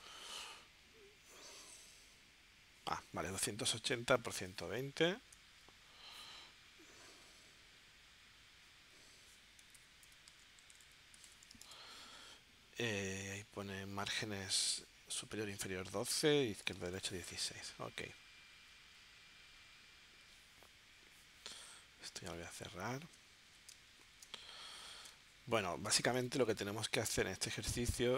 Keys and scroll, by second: 4.6 super+Tab, 10.8 0, 11.2 Tab, 22.9 z, 23.7 space, 26.4 super+Tab.